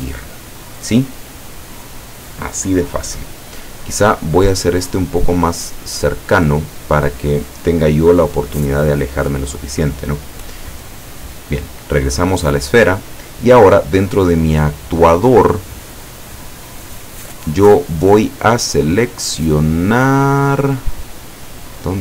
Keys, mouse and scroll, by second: 4.3 right click, 5.0-6.6 drag, 11.2 right click, 12.7 click, 14.1 click.